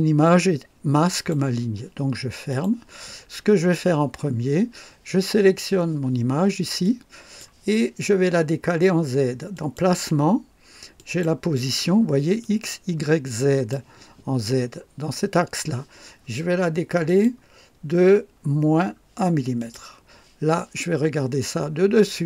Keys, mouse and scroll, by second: 0.2-1.5 drag, 2.5 click, 3.5-4.1 scroll down 2, 6.8 click, 9.5 click, 10.9 click, 12.4-13.9 drag, 17.0 click, 18.3 scroll down 1, 19.5 click.